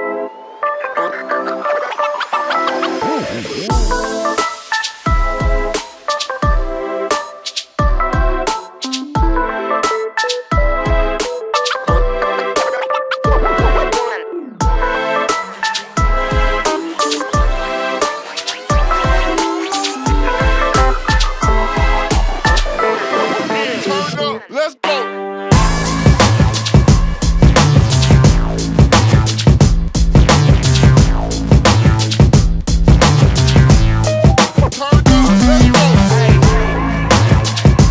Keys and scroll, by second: 3.2 shift+v, 8.5 shift+8, 9.0 2, 9.1 Return, 10.3 space, 10.3 Escape, 15.2 shift+v, 20.3 shift+v, 22.2 space, 22.3 Escape, 27.8 shift+v, 32.4-34.4 typing, 32.7 Return, 33.3 Escape, 34.5 Escape, 36.6 shift+v, 37.6 shift+8, 37.7 shift+8, 37.8 Return.